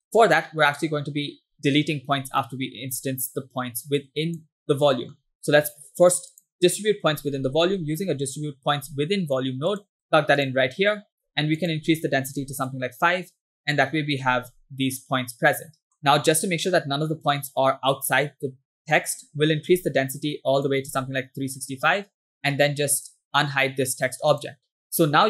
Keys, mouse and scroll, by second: 0.1 scroll down 2, 0.2 click, 2.4 middle click, 4.0 click, 5.0 middle click, 5.2-5.5 scroll up 2, 5.7 shift+a, 11.6-12.7 drag, 15.0-16.0 middle drag, 19.0-20.9 drag, 23.0 click, 24.4 click.